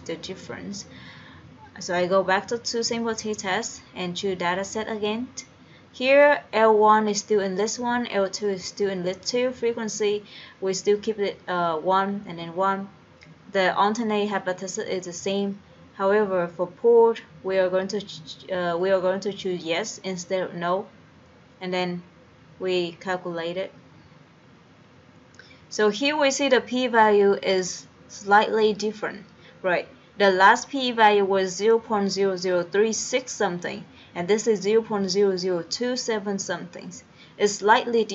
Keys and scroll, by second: 0.5 Down, 1.7 Down, 3.2 Return, 5.0 Return, 6.6 Down, 8.0 Down, 9.8 Down, 12.2 Down, 13.1 Down, 15.2 Down, 16.9 Right, 20.2 Return, 22.3 Down, 22.9 Down, 24.2 Return.